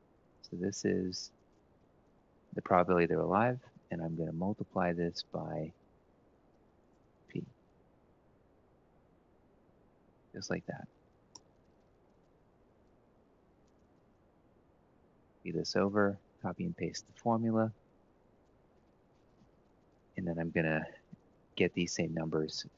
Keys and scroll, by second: 1.4 ), 3.3 *, 8.2 F4, 8.4 F4, 9.2 F4, 11.0 Return, 11.9 Up, 12.1 Up, 12.5 ctrl+Right, 12.8 Down, 13.5 1, 14.0 ctrl+Left, 15.3 ctrl+c, 16.1 ctrl+shift+Right, 16.6 ctrl+v, 18.3 Left, 19.0 ctrl+Down, 19.7 Right, 20.1 1, 20.5 Up, 22.2 ctrl+shift+Right.